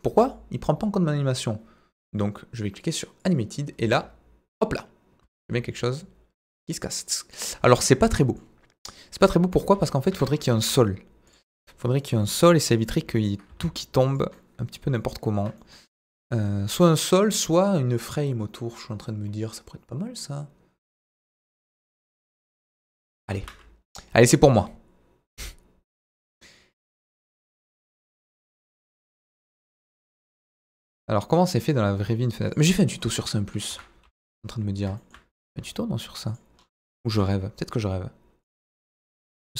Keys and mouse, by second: 0.1 space, 0.3-0.8 drag, 3.2 click, 3.8 space, 5.2 space, 6.0-7.3 drag, 8.2 middle click, 9.6 KP_1, 10.1 KP_3, 10.5 shift+a, 12.2 g, 12.2 middle click, 13.2 ctrl+click, 13.5 s, 14.1 click, 14.3-14.8 middle drag, 14.9-15.4 middle drag, 15.8-16.8 middle drag, 22.5 Delete, 23.1 KP_1, 23.3 shift+a, 26.9 s, 28.0 click, 28.2 middle click, 28.8 s, 28.9 middle click, 32.5 click, 32.7-33.0 middle drag, 33.7 KP_1, 34.0 z, 35.4 s, 36.3 click, 37.1 Tab, 38.4 click, 39.0 middle click.